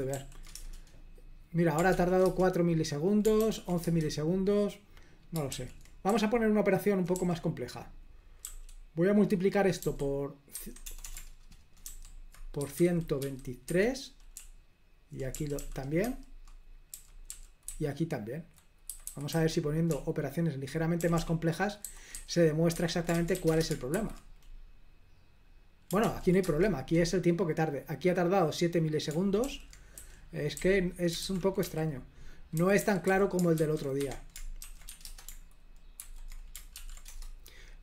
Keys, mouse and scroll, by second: 0.2 ctrl+p, 0.6 Return, 2.0 ctrl+p, 2.3 Return, 3.5 ctrl+p, 3.9 Return, 5.6 super+l, 6.1 l, 6.8-7.2 l, 8.5 a, 10.8-23.9 typing, 24.0 super+h, 26.1 ctrl+p, 26.5 Return, 29.5 super+l, 30.0-35.2 typing, 36.1 super+h, 36.8 ctrl+p, 37.2 Return.